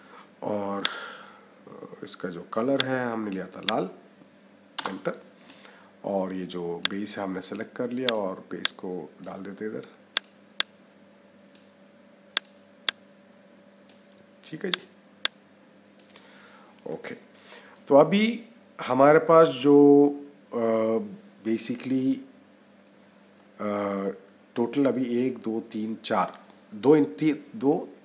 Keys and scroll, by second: 4.6 Return.